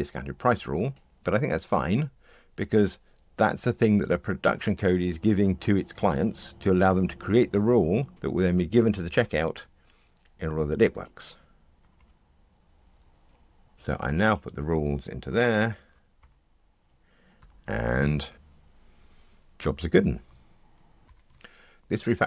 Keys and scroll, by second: 4.4 Delete, 11.7 Delete, 17.3 ctrl+r.